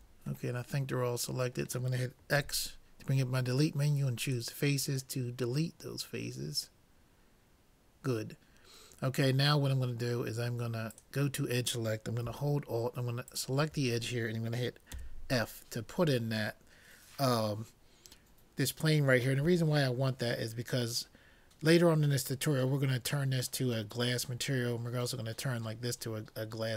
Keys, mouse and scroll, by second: 0.5-2.1 middle drag, 2.4 x, 5.2-7.2 middle drag, 10.9-12.6 drag, 13.3-14.9 drag, 14.9 f, 16.1-18.3 middle drag.